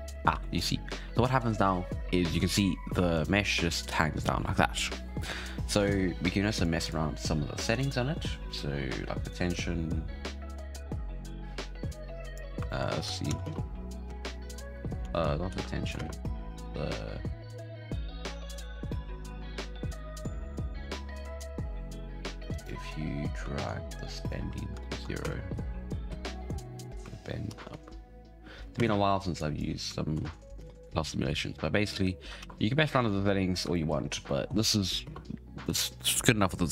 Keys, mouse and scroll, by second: 0.3 alt+a, 0.5-1.0 scroll up 6, 2.4 shift+scroll down 1, 2.5 shift+middle click, 3.1 right click, 3.4-6.5 scroll down 1, 6.6 click, 6.8 click, 7.7 click, 8.1-9.3 scroll down 3, 9.3-12.3 drag, 12.6-13.2 shift+middle drag, 13.2 shift+Left, 13.4 space, 14.0 space, 15.1 ctrl+z, 15.5 ctrl+z, 16.0 space, 21.3-22.6 drag, 23.6-24.8 shift+drag, 24.8 shift+Left, 25.2 space, 26.1 space, 26.4-27.5 drag, 27.5 shift+Left, 27.7 space, 28.8 space, 29.3-30.1 drag, 30.1 shift+Left, 30.5 space, 32.4 alt+a, 33.7-35.0 shift+middle drag, 35.0 space, 35.6 right click.